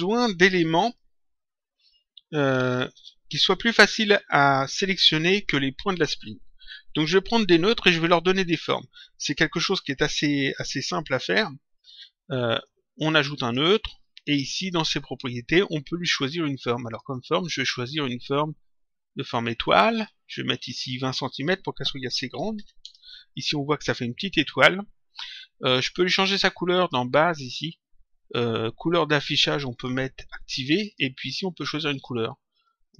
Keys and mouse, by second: 12.6 click, 16.7 click, 19.6 click, 20.8 click, 22.8 Return, 26.7 click, 29.7 click, 30.8 click, 31.9 click.